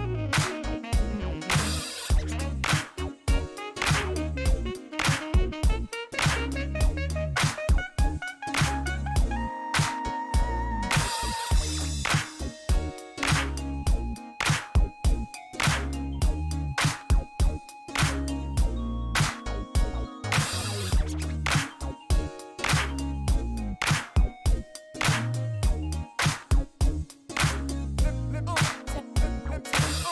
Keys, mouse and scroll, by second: 0.8 middle click, 1.7 middle click, 2.3 shift+right click, 6.5 click, 8.3 scroll down 2, 9.4 click, 11.6 click, 13.0-14.2 middle drag, 15.2 click, 16.0 click, 16.9 scroll up 1, 18.0 click, 18.8 click, 19.3 right click, 19.8 middle click, 20.0 scroll up 1, 23.1 click, 24.0 click, 25.9 click, 27.0 click, 28.5 click, 28.9 right click, 29.4 scroll up 1, 29.7 right click.